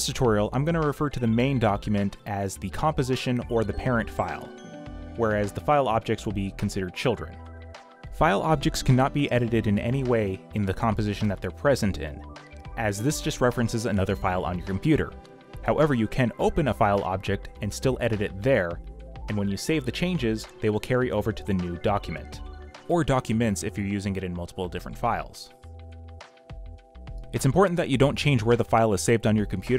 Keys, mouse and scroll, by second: 5.9-9.7 typing, 14.3 b, 16.3 ctrl+o, 21.2 x, 21.9 v, 22.5 b, 23.1 x, 28.3 v.